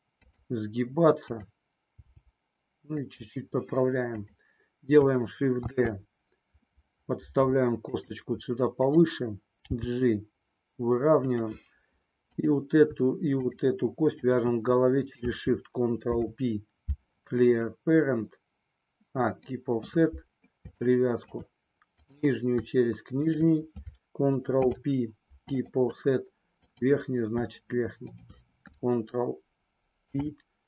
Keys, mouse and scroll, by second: 0.2 click, 1.1 click, 2.0 g, 3.0 click, 5.7 shift+d, 8.0 click, 8.7 click, 9.6 g, 11.2 click, 12.4 click, 14.1 shift+click, 16.0 ctrl+p, 20.8 shift+middle click, 23.2 shift+click, 24.5 ctrl+p, 26.6 click, 30.0 ctrl+p.